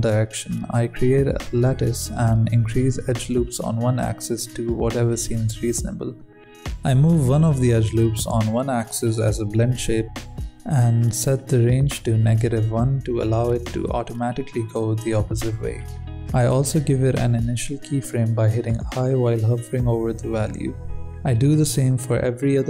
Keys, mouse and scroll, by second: 0.8 scroll up 3, 1.0 click, 1.3 KP_1, 1.7 click, 2.3 scroll up 2, 2.5 s, 3.1 s, 3.4 s, 3.9 scroll down 1, 4.1-4.9 scroll up 3, 4.9 n, 5.1-6.0 middle drag, 6.0 n, 6.2 middle click, 6.9 Tab, 7.2 middle click, 7.3 alt+a, 7.5 c, 8.8 Tab, 9.1 click, 9.7 Tab, 10.0 KP_1, 10.3 g, 11.2 Tab, 11.7-12.1 scroll down 5, 12.1-13.1 drag, 13.3-15.1 drag, 15.2-17.0 drag, 17.3 ctrl+z, 19.5 Tab, 19.6 Tab, 19.9 click, 20.3 alt+a, 20.7 g, 21.6 click, 22.0 Tab.